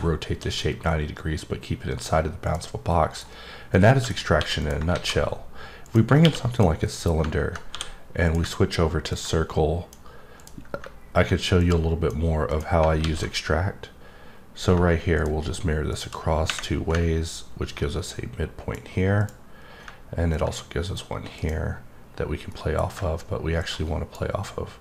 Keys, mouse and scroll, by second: 2.9 middle click, 3.7 middle click, 4.6 click, 6.5 click, 6.8 middle click, 8.2 click, 9.1 click, 10.4 click, 11.6 click, 12.5 click, 15.1 click, 15.9 click, 17.6 click, 19.2 click, 20.3 click, 21.4 click, 22.5 middle click, 23.6 click.